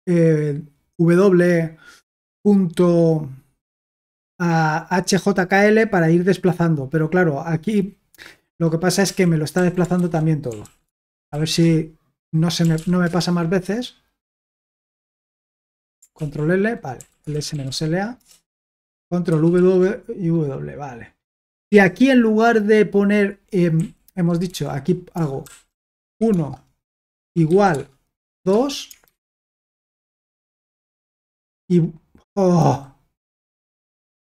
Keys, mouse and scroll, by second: 2.7-4.7 drag, 9.0 typing, 10.0 ctrl+c, 10.2-13.1 typing, 16.1 ctrl+l, 16.7-18.1 typing, 18.1 Return, 19.3 ctrl+w, 19.5 ctrl+w, 21.7 typing, 23.7-31.3 typing, 29.4 Escape, 31.4 super+l, 32.6 super+h, 33.3 super+k.